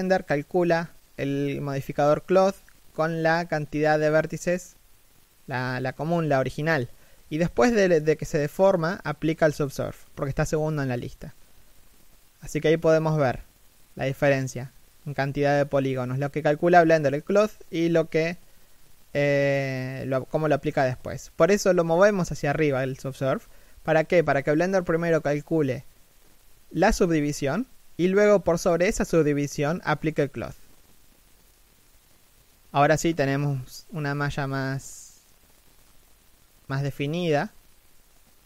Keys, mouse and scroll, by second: 2.8-3.5 scroll down 1, 3.5 shift+middle click, 4.4 middle click, 6.1 z, 23.6 shift+middle click, 24.0 z, 24.3-25.1 scroll down 1, 25.1 shift+middle click, 28.3 scroll up 1, 32.4 shift+middle click.